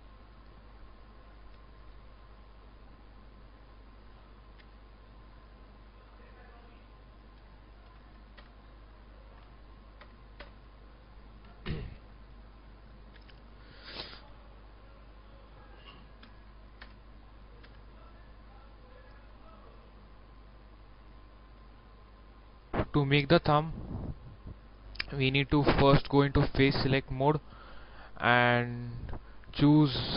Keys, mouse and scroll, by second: 0.6 click, 1.5 shift+middle click, 2.8 alt+right click, 3.5 alt+right click, 4.6 alt+e, 4.9 click, 5.7 s, 7.8 0, 8.3 Return, 9.4 w, 10.0 Return, 10.3 Return, 11.2 shift+middle click, 12.2 alt+right click, 13.1 alt+e, 13.5 click, 14.3 s, 16.2 0, 16.7 Return, 17.6 w, 19.6 click, 19.9-21.1 middle drag, 21.1 scroll down 1, 21.7 shift+middle click, 22.2 middle click, 22.7 click, 22.8 middle click, 23.7 shift+middle click, 24.3 scroll up 1, 26.6 right click, 27.8 click, 28.4 middle click, 29.0 shift+middle click, 29.5 scroll up 1.